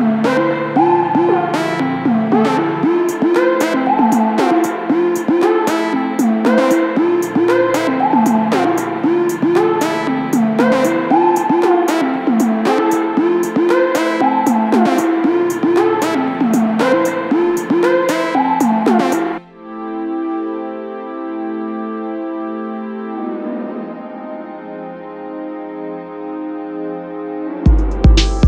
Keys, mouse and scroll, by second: 0.1 g, 2.9 ctrl+shift+click, 3.4-6.5 middle drag, 3.9 Tab, 6.5 scroll up 2, 6.7 alt+e, 8.9 click, 9.5 click, 9.8 g, 11.2 2, 11.3 click, 11.6 g, 13.3 3, 13.4 click, 13.7 g, 14.6 click, 14.7 scroll up 1, 14.9-16.6 middle drag, 14.9 scroll down 2, 15.0 Tab, 16.6 click, 16.8-20.4 drag, 19.0 KP_Enter, 20.8 click, 20.9-23.8 middle drag, 23.5 scroll up 2, 23.8 click, 23.9 Tab, 25.3 2, 25.4 click, 25.7 g, 26.9 click, 27.0 middle click, 27.2 Tab, 27.8 click, 28.3 shift+click.